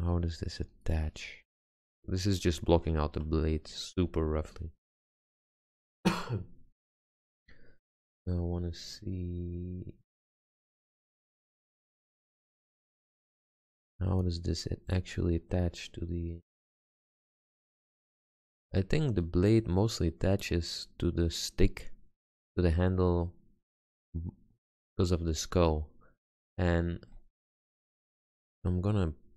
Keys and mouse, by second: 0.6-1.9 middle drag, 3.0 Tab, 4.3 z.